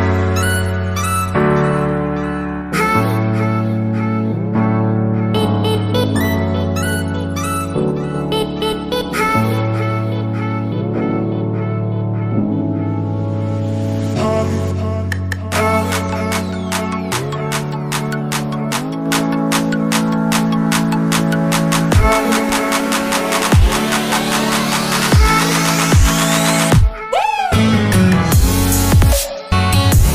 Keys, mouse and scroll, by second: 1.7 middle click, 13.1 double click, 13.9 typing, 14.3 Return, 16.9 alt+Tab, 21.4 double click, 22.2 typing, 22.6 Return, 24.1 alt+Tab, 29.4 alt+Tab.